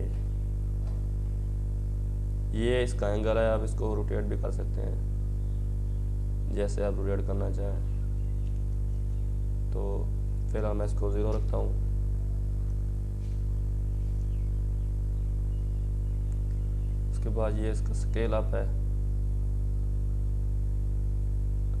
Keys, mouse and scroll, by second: 0.3 alt+scroll down 2, 2.4-4.2 scroll down 1, 4.2-15.7 drag, 15.7-21.8 drag.